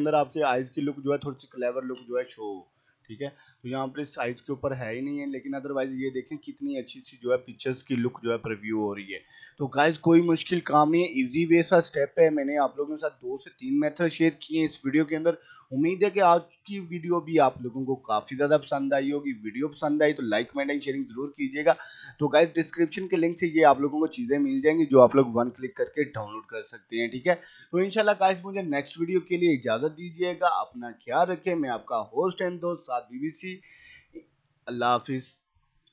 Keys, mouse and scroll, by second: 0.2 click, 0.4 space, 1.0 click, 1.2 space, 1.9 click, 4.1 click, 8.1 right click, 8.4 click, 18.7 click.